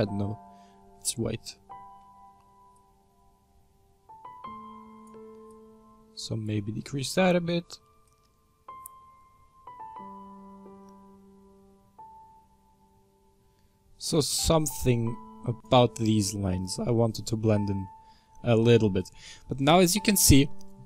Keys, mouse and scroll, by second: 0.1 click, 0.6-2.9 scroll up 2, 2.9-11.1 drag, 15.8-16.5 scroll down 5, 16.5-17.2 middle drag, 17.2-17.8 scroll down 4, 17.8-19.1 middle drag, 19.1-19.9 scroll up 8, 19.9 middle click, 20.3-20.8 scroll down 4.